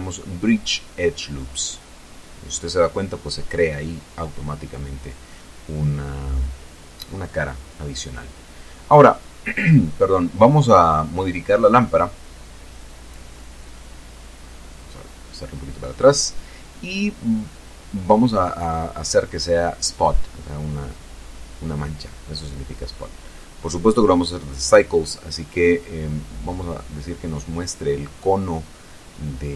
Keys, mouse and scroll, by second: 2.1 Return, 5.2 middle click, 6.3 Tab, 6.7-7.6 scroll down 4, 7.9-8.2 scroll down 2, 8.6 middle click, 9.4-10.7 middle drag, 10.7-12.1 scroll up 2, 12.1 right click, 13.2-14.4 drag, 14.8-16.2 drag, 17.8 click, 21.0 click, 22.7 click, 23.5 click, 24.9 click, 26.7 click, 29.1 r, 29.3 y.